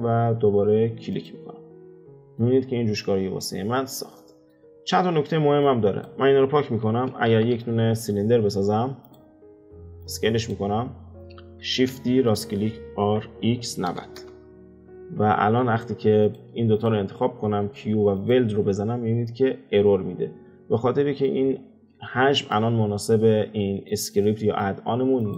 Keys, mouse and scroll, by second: 1.9-2.7 middle drag, 2.7-3.8 scroll up 2, 3.8-4.7 middle drag, 4.7-5.6 scroll down 3, 5.6 click, 6.7 x, 7.3 shift+a, 10.0 click, 10.7-11.6 scroll down 3, 11.6 shift+d, 13.1 r, 15.0-16.2 middle drag, 16.2 click, 16.7 shift+click, 17.5 q, 20.7-21.6 middle drag, 21.6-22.0 scroll up 3, 22.0-23.1 shift+middle drag, 23.1-23.6 scroll down 2, 23.6-25.2 middle drag, 25.2 click.